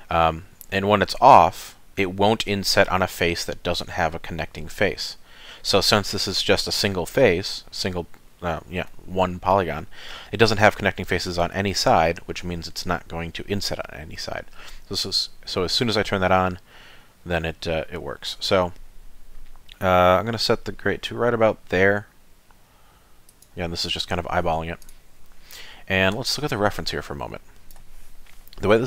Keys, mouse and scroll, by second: 24.8 click, 27.3 click.